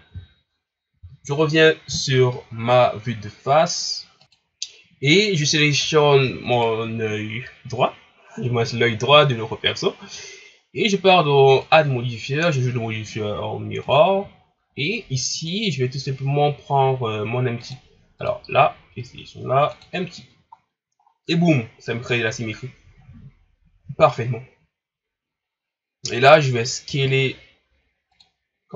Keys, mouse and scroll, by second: 5.7-6.1 scroll up 1, 6.5 right click, 13.9-14.6 drag, 15.4 click, 18.2-20.6 drag, 20.6 scroll down 1, 21.0 scroll up 4, 22.1 scroll down 1, 24.2-24.6 scroll up 3, 25.6-26.8 scroll up 1, 26.8 s.